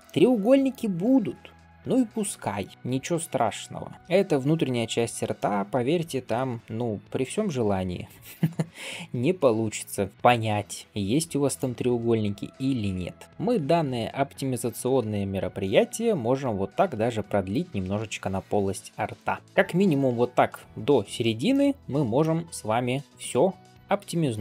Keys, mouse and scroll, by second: 0.0 shift+middle click, 0.2 middle click, 0.9 click, 1.9 shift+click, 2.7 middle click, 2.7 m, 3.2 click, 4.4 shift+click, 5.2 middle click, 6.1 m, 6.7-10.1 middle drag, 10.1 scroll up 1, 10.3 click, 10.8 m, 11.9 click, 12.4 m, 12.9 middle click, 13.2 scroll down 1, 13.3 click, 13.6 m, 14.6 click, 14.8 m, 15.4-15.9 scroll down 2, 15.7 middle click, 17.2-17.5 middle drag, 18.2 scroll up 1, 18.9 scroll up 1, 19.0 middle click, 19.4 click, 19.4 m, 20.0-20.9 scroll down 1, 21.4 middle click, 21.7 scroll up 2, 22.0 middle drag, 23.1 middle click, 23.6 click, 23.8 m.